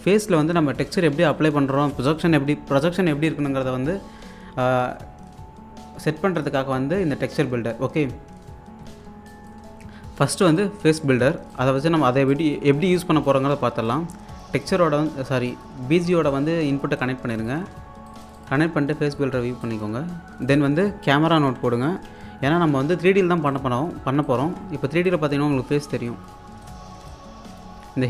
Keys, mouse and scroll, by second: 8.5-9.0 scroll down 1, 9.1 alt+scroll down 1, 9.3 alt+click, 12.1 scroll up 1, 12.3-17.7 alt+drag, 17.7 1, 18.1 click, 18.4 1, 19.2-19.6 scroll down 1, 19.7 alt+click, 21.2 Tab, 21.2-23.2 typing, 23.4 click, 24.4 Tab, 25.0 alt+click, 26.9 scroll down 1, 27.1-28.0 alt+drag.